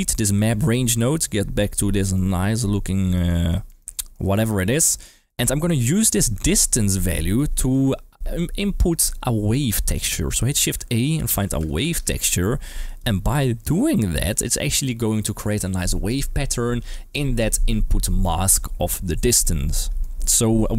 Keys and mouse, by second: 0.0 click, 0.8 ctrl+x, 1.8 shift+middle click, 2.1-3.1 middle drag, 3.3 shift+middle drag, 3.6 middle click, 3.9 shift+middle drag, 4.7 middle click, 5.2 middle click, 10.9 shift+a, 12.9 click, 20.0 middle click.